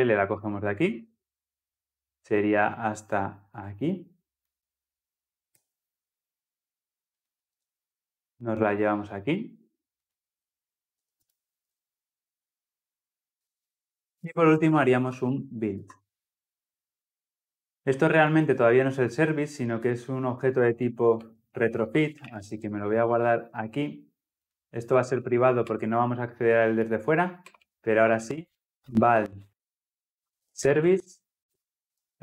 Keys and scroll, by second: 11.5 ctrl+v, 15.6 Return, 23.3 Escape, 25.5 Return.